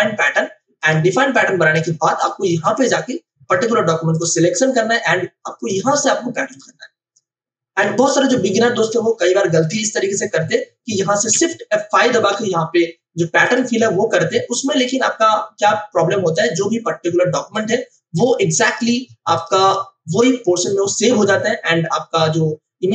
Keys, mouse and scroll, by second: 0.8 click, 2.5 v, 2.7 click, 3.5 w, 4.1 click, 9.6 click, 12.0 shift+F5, 13.4 click.